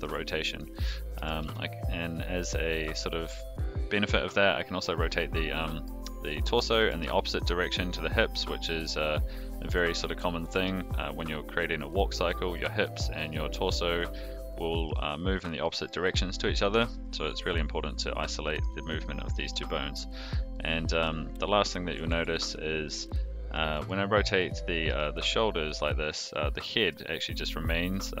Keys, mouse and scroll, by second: 1.1 r, 5.3-5.8 middle drag, 5.8-6.2 scroll down 1, 6.2 middle drag, 6.5 scroll down 1, 6.8 r, 8.7 click, 10.0 alt+r, 12.5-12.8 middle drag, 12.8 scroll down 1, 13.5 click, 14.1-14.8 middle drag, 15.6 middle drag, 16.5 middle drag, 18.4 shift+middle click, 20.5-21.0 middle drag, 21.3 click, 22.1 alt+r, 22.4 click, 23.0-23.5 middle drag, 23.7 r, 26.3-27.2 middle drag, 27.9 click.